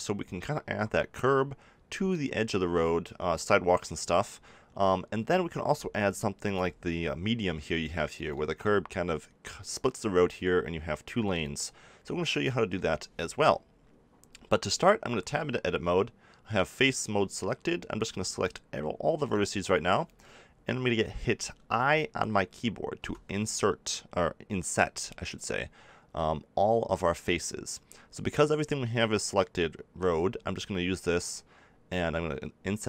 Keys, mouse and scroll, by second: 5.5 z, 6.6 middle click, 14.5 middle click, 15.1 Tab, 18.2 a.